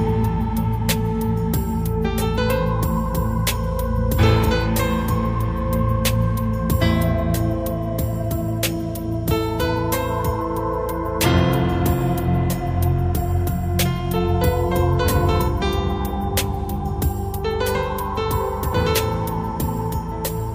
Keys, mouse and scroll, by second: 0.5 click, 1.9 Escape, 3.6 click, 4.2 click, 9.3 click, 10.2 click, 10.7 click, 11.3 click, 13.0 click, 13.8 click, 15.5 click, 16.8 click, 19.5 click.